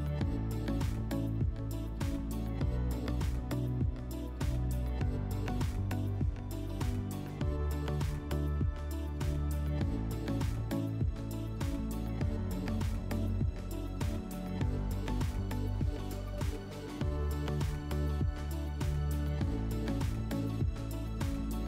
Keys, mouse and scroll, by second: 5.0-7.1 drag, 9.5-11.6 drag, 14.7 click, 18.5 click.